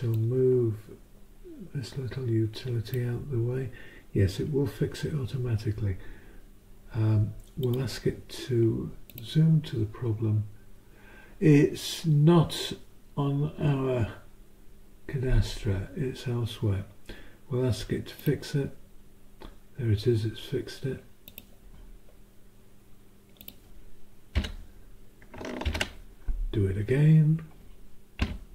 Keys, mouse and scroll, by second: 0.1-4.0 drag, 7.6 click, 9.3 click, 18.4 click, 21.3 click, 23.6 click, 24.3 Delete, 25.6 ctrl+shift+Up, 28.2 Down.